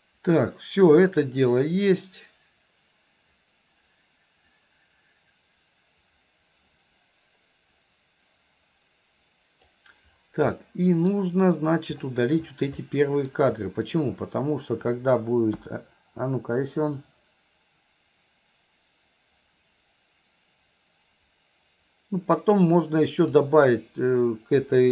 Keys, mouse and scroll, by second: 0.0-9.8 drag, 12.9 middle click, 17.1-23.4 drag.